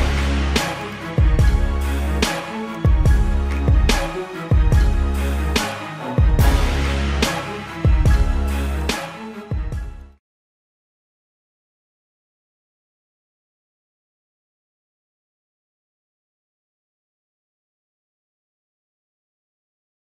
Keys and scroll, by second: 1.2 space.